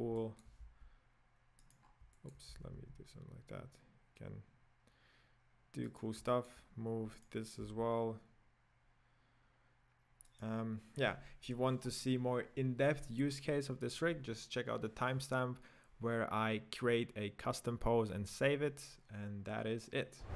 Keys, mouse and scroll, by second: 0.2-0.8 middle drag, 0.8 r, 1.9 scroll down 5, 2.1-2.5 middle drag, 2.5 r, 6.3-6.7 middle drag, 6.7-7.3 scroll down 2, 7.3-7.7 right drag, 7.8 g.